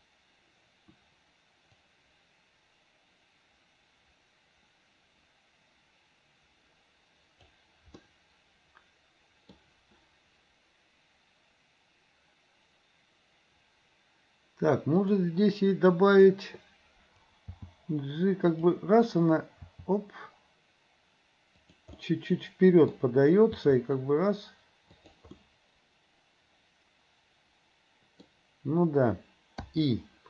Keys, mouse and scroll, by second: 2.6-7.7 drag, 8.0-9.6 middle drag, 15.2 click, 16.1 click, 17.5 g, 19.7 r, 22.0 middle click, 22.9-23.6 scroll down 1, 23.6 r, 25.4-28.3 middle drag.